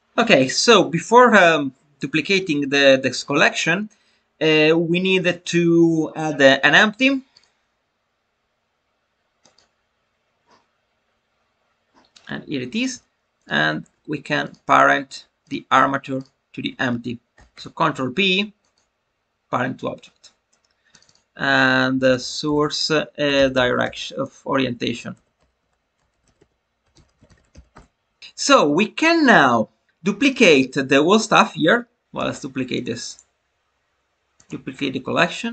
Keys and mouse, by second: 6.9 click, 7.4-9.5 drag, 13.3 shift+click, 16.1-28.2 shift+drag, 29.1 click, 32.0 drag, 33.1-34.4 right drag.